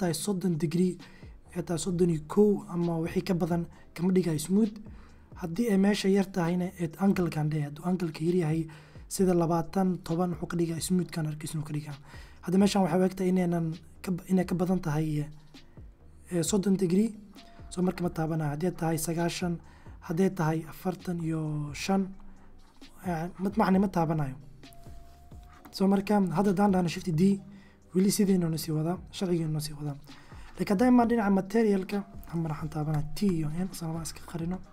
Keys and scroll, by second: 26.0 shift+d, 32.1 t, 32.4 n.